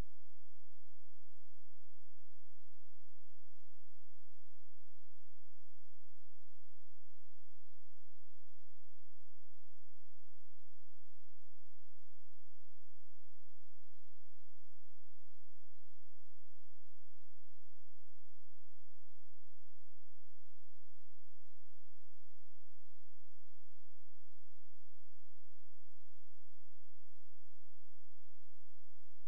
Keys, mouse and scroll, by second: 1.1 click, 11.9 ctrl+z, 13.2 click, 15.8 click, 22.2 Escape, 22.8 click, 24.3 z, 26.0 click.